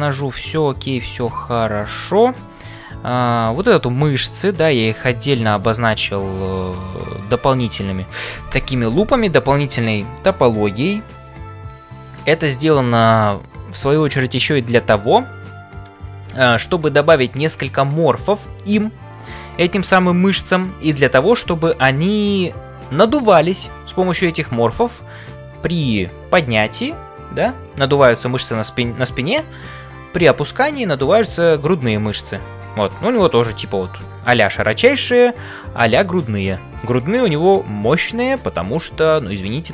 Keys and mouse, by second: 0.3 middle click, 1.3 s, 1.7 middle click, 34.9-36.1 middle drag, 36.5 middle click.